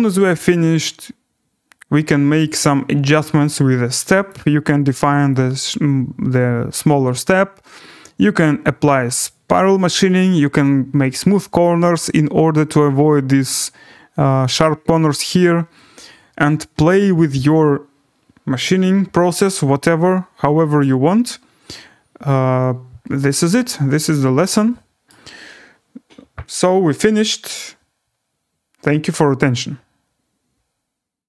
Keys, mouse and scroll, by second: 2.1 scroll down 4, 2.4 right click, 3.6 scroll, 4.3 click, 5.3 click, 11.7 scroll, 12.5 scroll, 14.9-15.8 scroll, 16.7 scroll, 17.5 scroll, 18.6 scroll, 19.8 right click, 20.0-20.7 scroll, 23.3 right click, 23.5-24.1 scroll, 25.1 right click, 27.5 click, 28.7-29.0 scroll down 4, 30.5 alt+w.